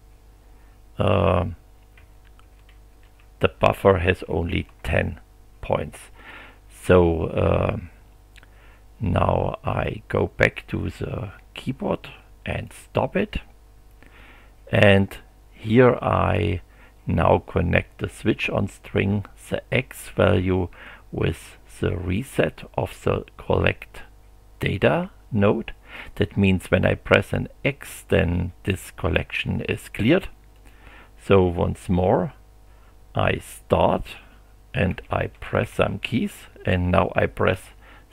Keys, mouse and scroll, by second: 1.7-4.5 typing, 9.7 click, 12.5 click, 19.2-22.8 drag, 30.5 click, 33.2 click, 34.9 f, 35.9 d, 37.5 x.